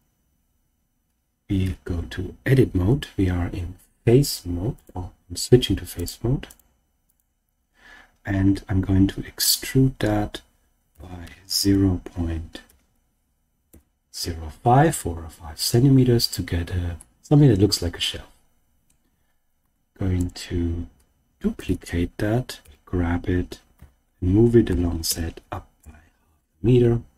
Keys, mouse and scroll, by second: 1.6 Tab, 4.7 click, 5.9 click, 6.4 click, 7.0 click, 9.4 e, 10.9 ., 11.2 0, 12.6 5, 13.6 Return, 16.9-18.8 middle drag, 19.5 Tab, 20.1 click, 21.5 shift+d, 22.6 g, 23.7 z, 25.0 ., 25.0 5, 25.8 Return.